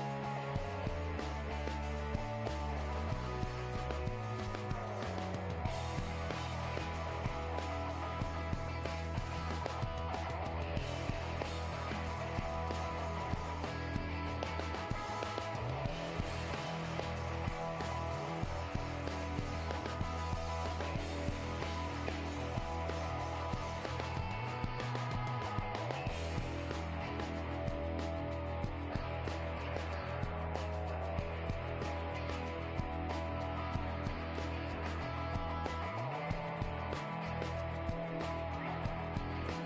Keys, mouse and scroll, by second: 0.7 g, 1.4-6.1 middle drag, 7.7-10.4 middle drag, 8.2-11.1 right drag, 9.8 g, 10.7 middle click, 10.9 g, 11.1 click, 11.3-13.3 middle drag, 12.4 g, 13.4 middle click, 13.5 g, 14.3-17.4 right drag, 14.9 g, 15.8 g, 27.3 middle click, 27.8-29.6 right drag, 29.5 middle click, 30.3-32.2 middle drag, 30.6 g, 31.9 right click, 32.2 g, 32.9-34.5 middle drag, 33.7 g, 35.1 ctrl+Tab, 36.4-38.7 drag, 37.8 g, 38.7 middle click, 38.7 right click, 39.0-39.6 middle drag.